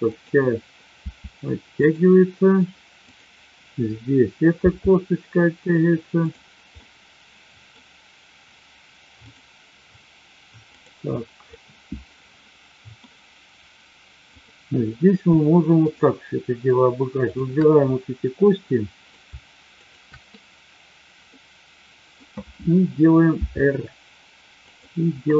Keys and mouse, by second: 0.8 r, 3.1-4.0 drag, 4.7 r, 6.2 click, 6.8-7.6 middle drag, 10.7-11.7 drag, 11.8-13.0 middle drag, 14.2-15.4 drag, 15.8-16.7 shift+drag, 17.2-18.4 shift+drag, 18.4-19.0 middle drag, 19.8-20.7 shift+drag, 21.2-22.2 middle drag, 23.5 r.